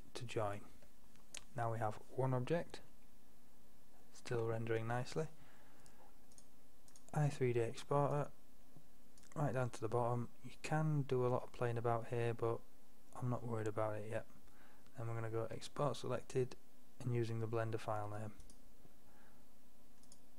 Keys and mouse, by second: 4.4 F12, 4.4 F11, 8.1-18.5 middle drag.